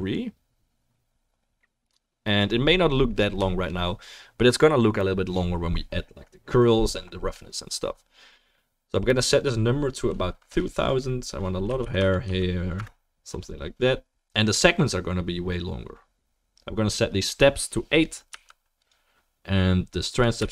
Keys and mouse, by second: 12.0 0, 20.1-20.5 drag.